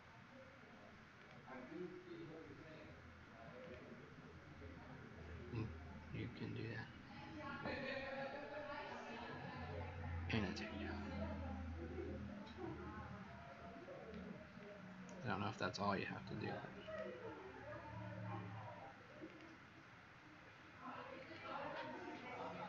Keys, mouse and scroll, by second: 14.2-15.3 scroll down 1, 15.3-15.7 scroll up 6, 16.8 click, 18.7 Escape, 19.2 click.